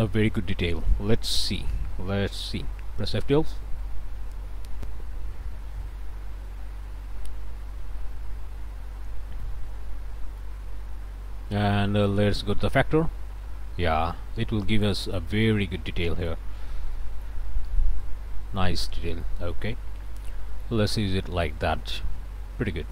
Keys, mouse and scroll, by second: 2.7 F12, 9.5-10.7 drag, 12.1-15.3 drag, 15.5 scroll down 1, 15.9 click, 16.6 scroll up 1, 17.0 click, 17.6-17.9 scroll up 1, 18.1 click, 19.3 click, 19.6 scroll up 1, 20.1 click, 21.0 click.